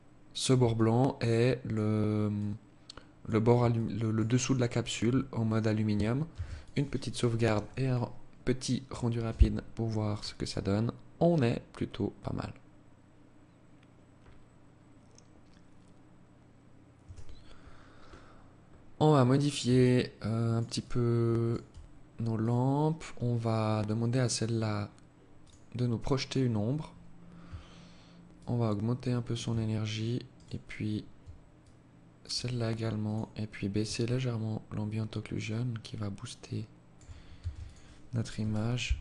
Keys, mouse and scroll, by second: 1.5 alt+click, 2.9 alt+shift+click, 3.6 alt+click, 5.4 ctrl+s, 16.1 Escape, 16.7-17.8 scroll down 9, 17.8 scroll up 2, 18.3-18.7 scroll down 1, 18.9 alt+click, 19.9 alt+click, 21.5 right click, 22.9-23.3 scroll down 4, 23.9-24.5 scroll down 3, 24.5 click, 24.5-25.6 scroll down 1, 27.5 shift+click, 29.5 right click, 30.7 shift+click, 32.2 click, 33.2 shift+click, 36.5 ctrl+s.